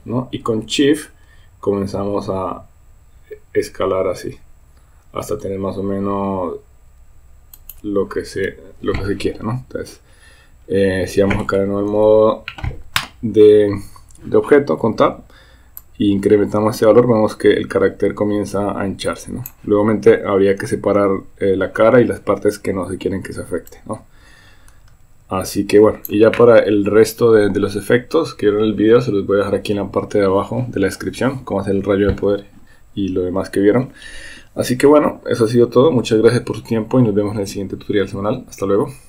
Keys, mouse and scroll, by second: 12.3 Tab, 16.2-19.5 drag, 23.7-26.1 drag.